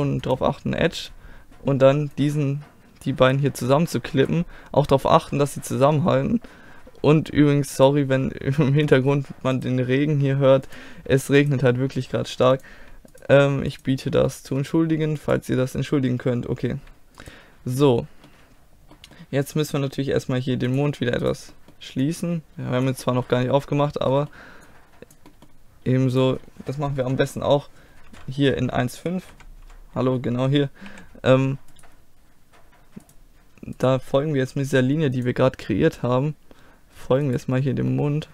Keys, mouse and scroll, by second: 1.0-5.7 drag, 2.2 right click, 5.7 middle click, 7.7-18.9 drag, 9.6 right click, 10.7-14.4 right drag, 14.3 middle click, 17.1 middle click, 18.9 middle click, 20.7-21.7 drag, 21.3 right click, 21.5-23.3 middle drag, 23.3 click, 23.9 middle click, 24.7-26.2 drag, 26.2 right click, 27.0 KP_1, 28.1 KP_5, 29.3 KP_1, 29.6 KP_5, 30.9 z, 31.8 click, 31.9-34.7 right drag, 34.7 g, 35.2 click, 35.7-37.3 middle drag, 37.3 right click, 37.9 middle click.